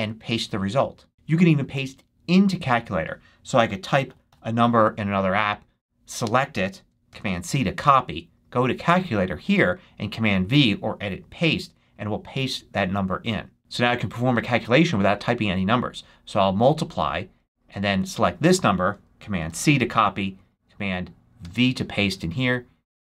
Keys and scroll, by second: 1.1 Return, 3.4-4.7 typing, 7.0 super+c, 19.3 super+c, 21.3 super+v.